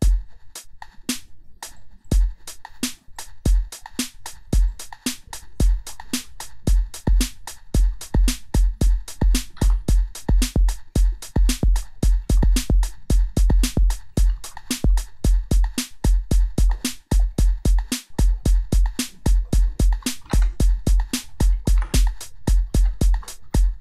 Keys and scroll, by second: 6.4 r, 7.9 u, 9.2-10.0 typing, 11.6 e, 14.0-15.4 typing, 20.2 Left, 20.4 Right, 21.5-23.8 typing.